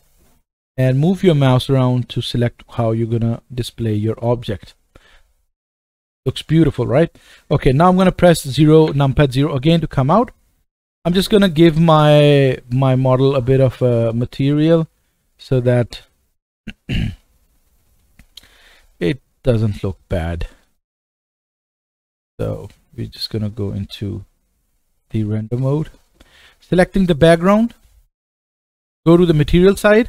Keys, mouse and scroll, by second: 4.3-11.2 right drag, 8.8 KP_0, 11.2 click, 11.3-13.0 right drag, 13.0 click, 13.1-14.7 right drag, 14.7-17.2 drag, 15.4-17.2 middle drag, 15.4-18.0 right drag, 18.0 middle click, 18.6 right click, 19.6-27.1 drag, 27.1-30.0 right drag.